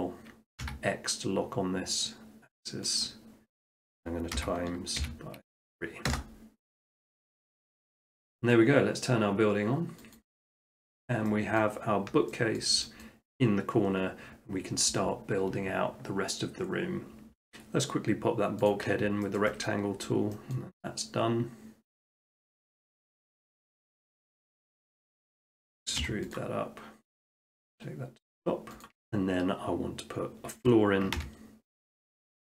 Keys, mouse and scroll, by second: 0.7 x, 3.0 click, 3.4 middle click, 3.5 middle click, 4.4 x, 5.0 x, 6.1 Return, 8.5-9.7 middle drag, 10.2 click, 11.1 shift+middle click, 11.6 middle click, 11.8 middle click, 11.9 middle click, 12.1 shift+middle click, 12.6 shift+middle click, 12.8 shift+middle click, 13.0 middle click, 17.3 middle click, 18.7 click, 19.4 shift+middle click, 19.7 middle click, 20.0 middle click, 20.2 middle click, 20.3 shift+middle click, 20.6 middle click, 22.1 click, 25.1 click, 26.0 click, 26.0 e, 27.1 click, 27.5-28.7 drag, 28.9 click, 29.0 middle drag, 30.7-31.2 middle drag, 31.2 r, 32.1 click.